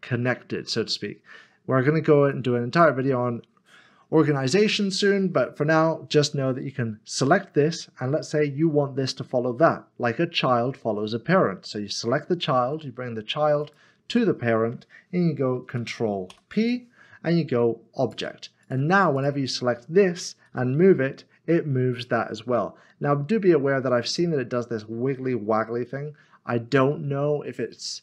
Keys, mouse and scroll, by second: 2.3 click, 13.4 click, 13.6 shift+click, 16.3 ctrl+p, 19.7-20.5 scroll down 1, 20.5 g.